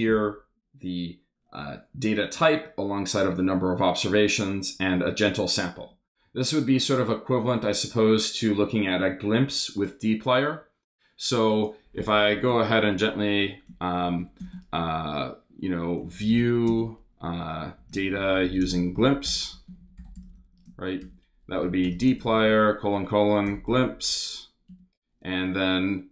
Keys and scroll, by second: 12.3 Return, 12.9 Return, 14.0 shift+3, 14.4 shift+space, 15.7-24.0 typing, 21.0 shift+Return, 24.7 Return.